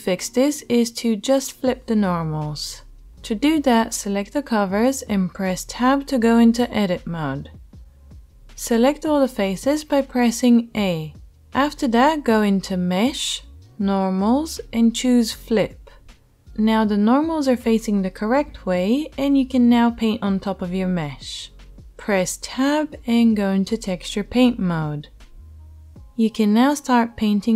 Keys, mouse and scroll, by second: 0.3 ctrl+z, 3.2 Tab, 6.6 Tab, 9.7 a, 12.9-27.5 drag, 21.4 Tab.